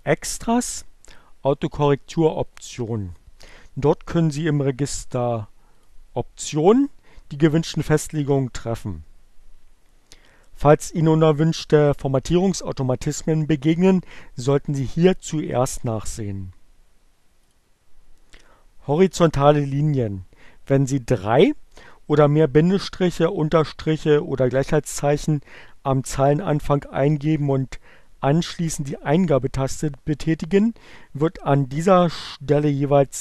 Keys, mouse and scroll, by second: 5.6 click, 17.2 click.